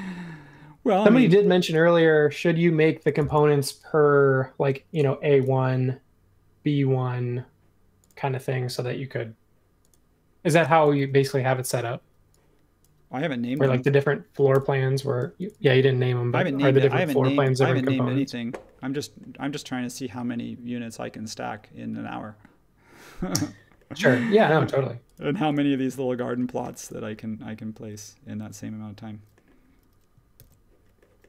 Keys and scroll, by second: 13.5 super+g, 14.5 BackSpace, 30.3 super+c.